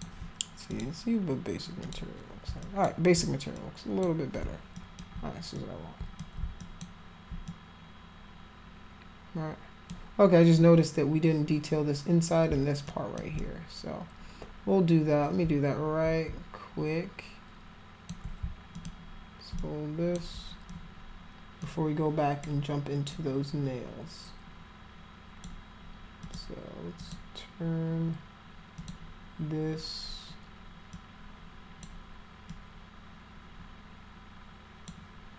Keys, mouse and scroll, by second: 0.7 click, 1.8 click, 2.6 alt+click, 3.5 click, 4.7 alt+click, 5.5 click, 6.6 alt+click, 7.4-9.9 drag, 12.8 alt+click, 13.3-18.1 drag, 18.7 alt+click, 19.6 click, 21.6 click, 23.1-25.4 drag, 26.2 click, 27.0 click, 28.8 click, 30.9 click, 32.5-34.9 drag.